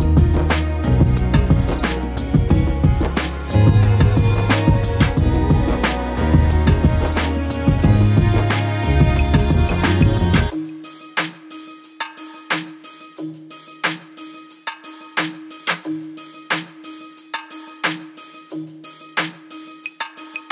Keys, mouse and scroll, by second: 0.3 shift+middle click, 1.0 shift+click, 1.6-1.9 shift+drag, 2.1 shift+middle click, 2.6 shift+click, 2.8 shift+click, 3.1 shift+middle click, 3.4 shift+click, 3.9 shift+click, 4.0 shift+middle click, 4.4 shift+click, 4.9-5.2 scroll down 11, 5.3 scroll up 4, 5.5 shift+middle click, 5.9 shift+click, 6.9 shift+click, 7.6-8.0 shift+middle drag, 8.0 shift+click, 8.2 shift+click, 8.4 shift+click, 8.7 shift+click, 9.3 shift+click, 9.4-9.7 shift+middle drag, 10.0 shift+click, 10.6-11.6 shift+drag, 11.9 shift+middle click, 12.1 shift+click, 13.0 ctrl+l, 13.2-13.6 scroll down 2, 13.6 KP_7, 13.9-15.0 shift+middle drag, 15.0-15.7 scroll up 10, 15.2 shift+middle click, 15.4 shift+middle click, 15.7 shift+middle click, 16.4 ctrl+i, 16.8 s, 19.6 scroll down 1, 20.0 Tab, 20.3-20.5 scroll down 21.